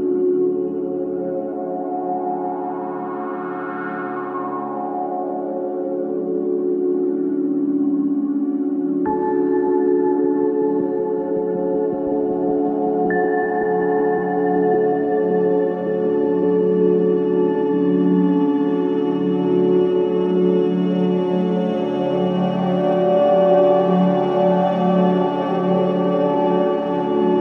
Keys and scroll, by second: 0.2 3, 5.3 Delete, 14.0 ctrl+z, 14.7 ctrl+z, 15.4 ctrl+z, 19.7 4, 21.2 3.